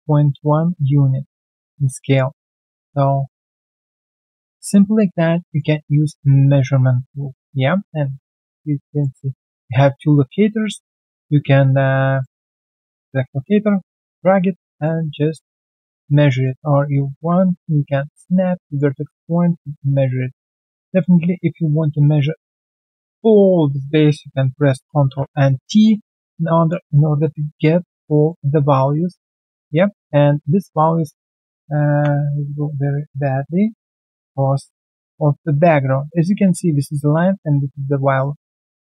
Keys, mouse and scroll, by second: 1.5 alt+click, 2.0 alt+right click, 2.3 alt+middle click, 2.7 alt+click, 4.0 alt+click, 4.3 alt+middle click, 4.6 alt+right click, 4.8 alt+click, 5.1 alt+middle click, 5.4 alt+right click, 5.8 alt+middle click, 6.0 alt+right click, 6.4 alt+scroll down 1, 6.9 alt+click, 9.3 double click, 9.7 alt+click, 10.0 alt+right click, 10.5 alt+middle click, 12.4 alt+middle click, 12.7 w, 17.5 alt+click, 18.0 alt+middle click, 18.6 alt+click, 18.9 alt+right click, 19.4 alt+click, 19.8 alt+middle click, 20.1 alt+click, 20.5 alt+scroll down 1, 20.9 alt+middle click, 21.2 alt+right click, 22.6 alt+middle click, 23.4 alt+click, 24.4 alt+Left, 24.9 ctrl+t, 25.5 alt+click, 25.8 alt+right click, 26.1 alt+click, 26.3 alt+middle click, 26.6 alt+right click, 26.8 alt+click, 27.1 alt+middle click, 27.4 alt+click, 28.1 alt+middle click, 28.4 alt+click, 29.1 alt+middle click, 29.6 alt+right click, 32.7 alt+b, 34.5 alt+middle click, 34.8 alt+right click, 37.6-37.9 alt+scroll down 1, 37.9 alt+middle click, 38.3-38.7 alt+scroll down 1, 38.7 alt+middle click.